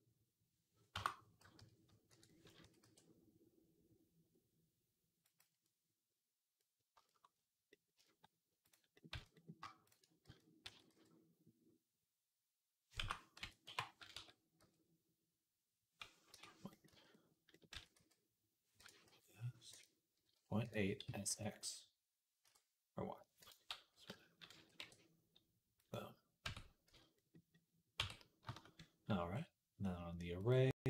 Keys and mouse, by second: 1.4 ., 2.4 s, 6.4-8.5 middle drag, 8.5 click, 8.9-30.2 middle drag, 8.9 z, 10.1 z, 10.5 s, 13.2 ., 13.5 8, 14.0 s, 16.7 z, 17.6 s, 18.9 s, 20.1 ., 20.9 s, 24.4 s, 26.3 Tab, 26.7 z, 27.8 Tab, 30.2-30.8 drag.